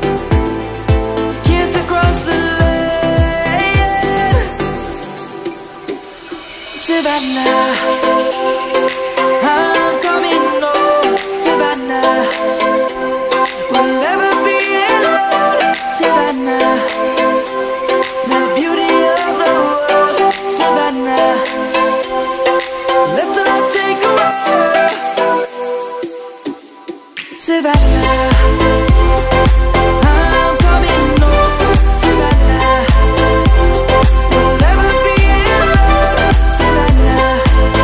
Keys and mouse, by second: 1.6 middle click, 2.3 Tab, 4.6 click, 5.0 Tab, 5.5 click, 7.1 shift+middle click, 7.9 click, 8.3 Tab, 9.1 Tab, 10.1 click, 13.1 s, 14.8 right click, 16.9 e, 21.5 click, 22.3 middle click, 22.3 Tab, 24.5 click, 25.1 middle click, 30.7 click, 34.1 click, 34.4 right click, 35.0 click, 35.9 middle click, 36.7 click, 37.2 Tab.